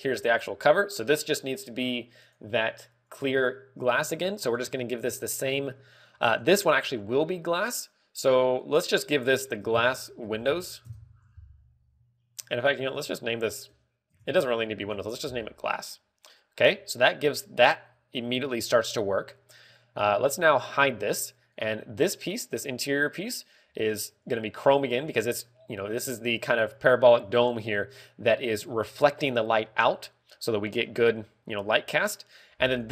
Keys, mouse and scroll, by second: 0.0 right click, 0.1 z, 0.3 g, 1.3 right click, 5.0 click, 6.6 shift+middle click, 8.3 click, 9.1 click, 13.1 click, 21.4 h, 22.8 right click, 24.7 click.